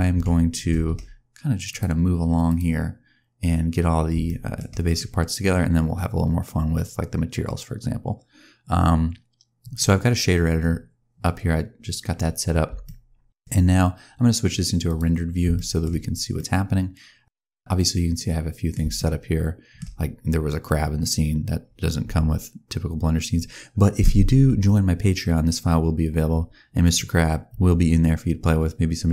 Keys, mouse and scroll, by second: 0.0 n, 0.1 n, 1.6 click, 2.8-3.6 scroll down 1, 4.1 shift+scroll down 1, 4.1 shift+middle click, 12.3-12.6 scroll up 1, 12.7 shift+middle click, 14.8 click, 15.4 shift+middle click, 15.8-16.2 scroll down 2, 16.2 middle click, 18.9 shift+middle click.